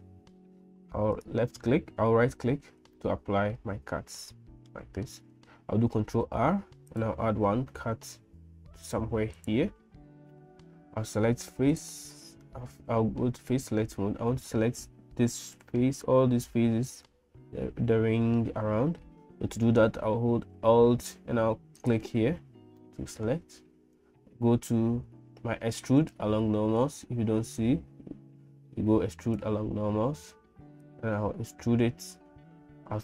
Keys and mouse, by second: 3.3-5.1 middle drag, 6.0 ctrl+r, 11.7 click, 21.8 alt+click, 22.8 middle click, 26.9-29.6 drag, 30.8-33.0 drag.